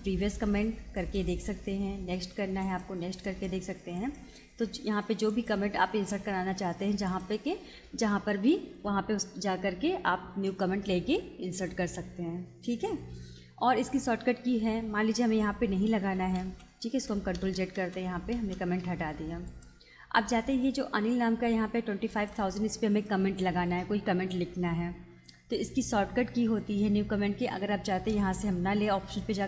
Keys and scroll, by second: 15.9 ctrl+z.